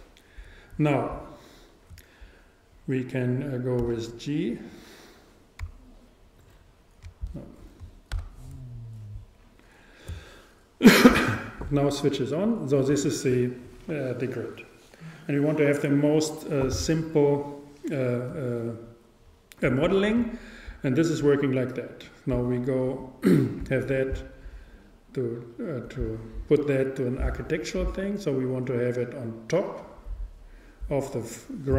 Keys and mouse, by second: 3.8 g, 7.3-9.2 drag, 8.1 super+z, 12.3-14.2 drag, 21.1-22.9 drag, 23.0 click.